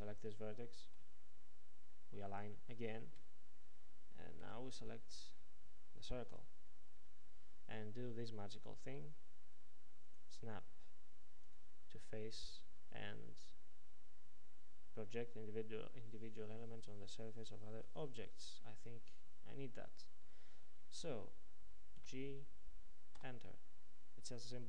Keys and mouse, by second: 4.6 a, 6.4 l, 22.1 g.